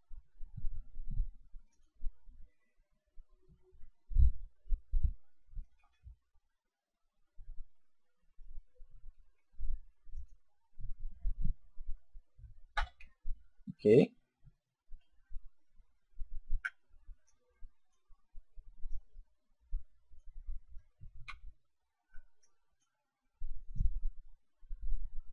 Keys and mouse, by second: 1.7 click, 5.7 ctrl+r, 10.1 click, 12.6 a, 16.4 b, 18.7 click, 21.1 a, 21.8 b, 23.6 click.